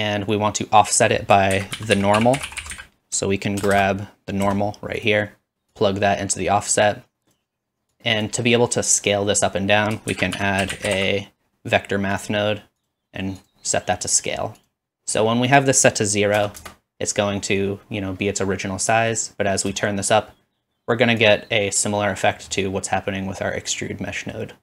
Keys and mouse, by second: 1.5 shift+a, 3.7 BackSpace, 5.0 click, 10.1 shift+a, 12.9-17.1 drag, 13.1 typing, 15.5 typing, 18.8-20.4 drag.